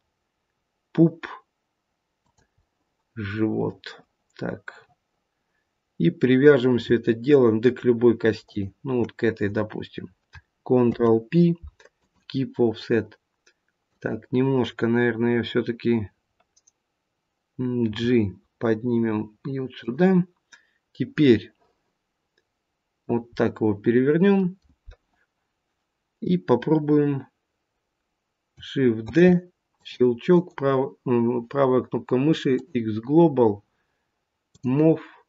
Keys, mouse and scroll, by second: 2.5 middle click, 5.3 middle click, 8.3 shift+click, 10.7 ctrl+p, 13.8 click, 17.8 g, 21.1 middle click, 23.3 middle click, 29.0 shift+d, 30.3 right click, 34.5 click.